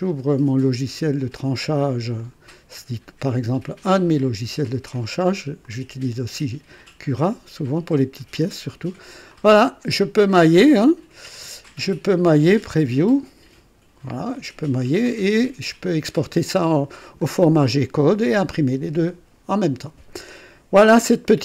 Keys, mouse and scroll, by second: 0.1 click, 2.3 click, 4.2 click, 5.6-8.3 drag, 9.3-12.0 drag, 12.7 click, 14.3-17.4 drag, 17.7-19.5 drag.